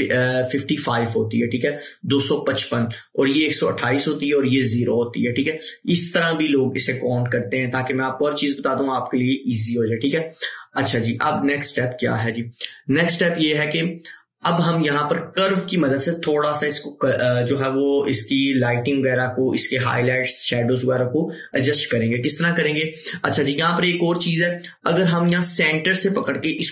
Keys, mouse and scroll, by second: 26.3-26.7 drag.